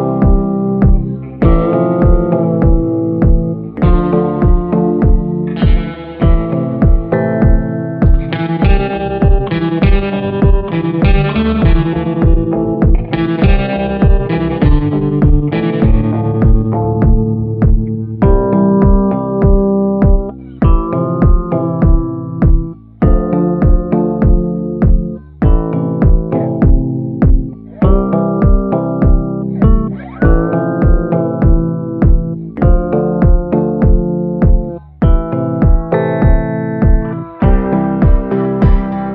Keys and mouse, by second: 0.3 click, 1.1 ctrl+z, 2.7 click, 4.7 middle click, 5.3-9.0 shift+middle drag, 9.8-10.3 [, 10.3-11.7 drag, 11.8 click, 12.0 [, 12.4 [, 12.5 click, 12.5 [, 13.7 ctrl+z, 13.9 [, 14.2 click, 14.5 click, 15.1 ctrl+z, 15.4 click, 15.7 click, 16.1 ], 16.4 ], 16.5 ], 16.5-18.3 drag, 20.2 middle click, 20.9 click, 21.6-22.0 ], 22.0-23.4 drag, 23.6 middle click, 24.1 middle click, 24.4 middle click, 25.1-27.3 drag, 27.4 middle click, 27.9-29.2 drag, 29.4 middle click, 30.2 click, 30.8 middle click, 31.6 right click, 31.9 middle click, 32.5 click, 32.6 middle click, 33.5 ctrl+z, 34.1 shift+middle click, 35.5-36.0 [, 36.2 click, 36.5 ], 36.8 ], 36.9 click, 36.9 ], 37.5 click, 38.1 ctrl+z, 38.3 [, 38.5 click.